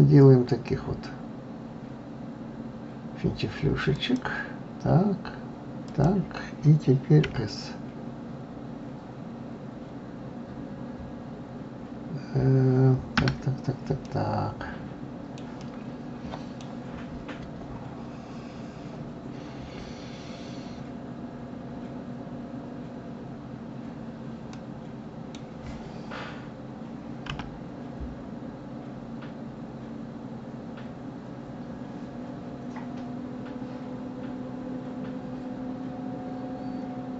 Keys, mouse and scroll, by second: 14.0-17.9 middle drag, 17.9-19.3 scroll up 4, 20.6-23.6 scroll down 3, 23.8-24.5 scroll down 2, 24.5-27.3 middle drag, 27.3 s.